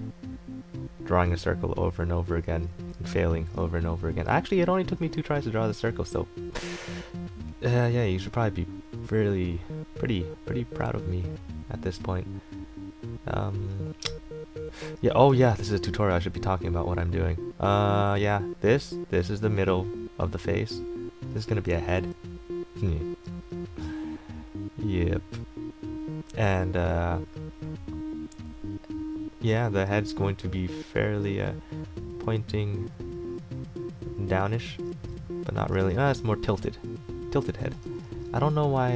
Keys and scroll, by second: 3.0 z, 4.3 e, 11.0 a, 15.5 ctrl+z, 21.6 ctrl+z, 29.8 ctrl+z, 34.9 ctrl+z, 37.8 ctrl+z.